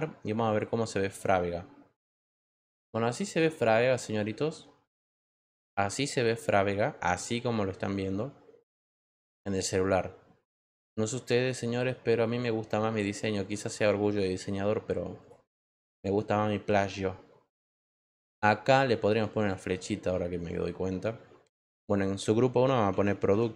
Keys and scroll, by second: 23.0-23.5 typing.